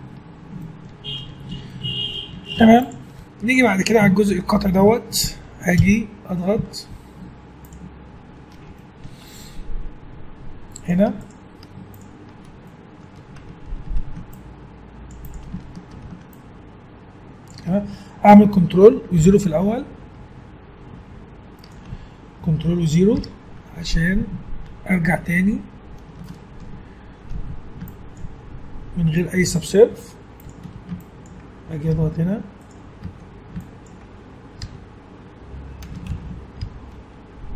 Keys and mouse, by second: 2.5 ctrl+s, 5.7 KP_1, 6.5 z, 10.7 click, 11.6 Tab, 12.7 click, 13.8 ctrl+r, 15.9 ctrl+r, 23.1 ctrl+0, 25.1 middle click, 27.3 a, 27.8-30.4 drag, 29.4 g, 30.7 a, 31.0-32.3 drag, 31.9 f, 32.6 right click, 33.0 a, 33.6 click, 33.6 right click, 34.6 f, 36.1 ctrl+z, 36.6 g.